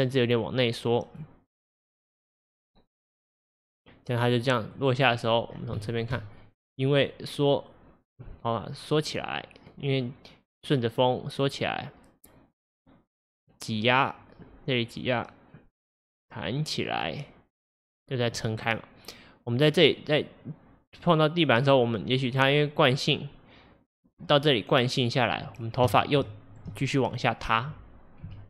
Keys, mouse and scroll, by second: 2.3 click, 3.1 click, 4.5-5.8 drag, 5.0 scroll down 1, 5.8-6.1 shift+middle drag, 6.1 shift+scroll up 1, 7.1-10.1 drag, 26.3-26.8 shift+middle drag, 26.8-27.2 scroll up 4, 27.2-28.3 middle drag, 28.3 KP_3.